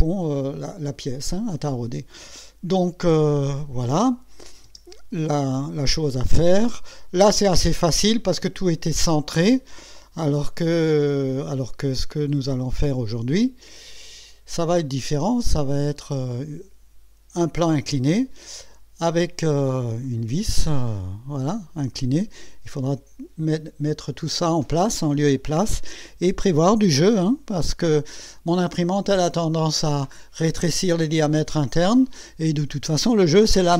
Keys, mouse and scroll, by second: 4.4 click, 4.7 space, 5.7 click, 14.2 click, 20.0 click, 21.5-21.8 scroll up 1, 22.3 scroll up 1, 26.6 scroll up 2.